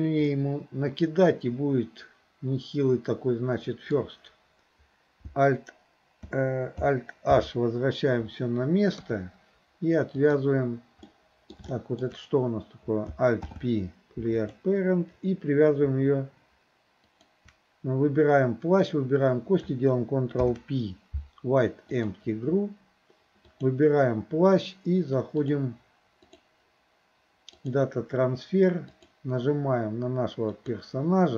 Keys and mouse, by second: 0.3-4.0 middle drag, 7.4 alt+h, 9.0 KP_3, 10.2 click, 11.1-11.6 middle drag, 11.8 shift+middle drag, 13.4 alt+p, 17.0 shift+click, 20.4 ctrl+p, 23.5 click, 26.3-27.8 drag, 29.0 click.